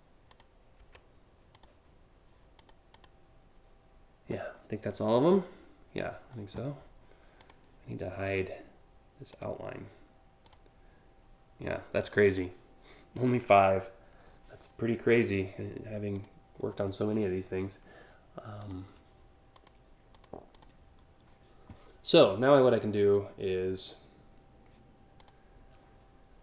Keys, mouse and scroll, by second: 0.4 Delete, 1.1 click, 2.2 click, 2.6 click, 4.3 scroll down 1, 4.5 scroll up 2, 7.0 click, 9.0 click, 10.1 click, 15.8 click, 18.2 click, 19.2 click, 19.7 click, 20.2 click, 24.8 click.